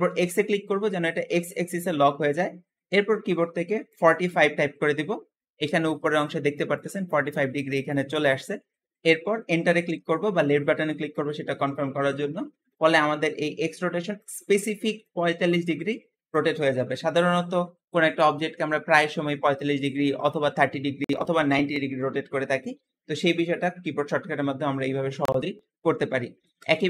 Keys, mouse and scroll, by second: 26.2 ctrl+z.